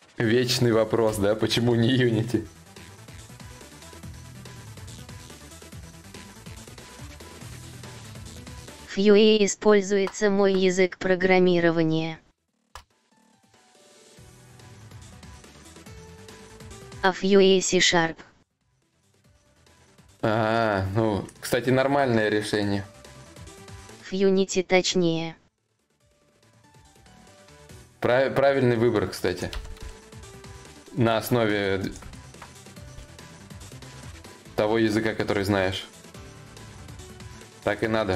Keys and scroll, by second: 9.4 ctrl+a, 10.0 ctrl+c, 13.8 ctrl+z, 29.0 shift+d, 29.8 shift+d, 32.2 shift+d, 32.8 shift+d.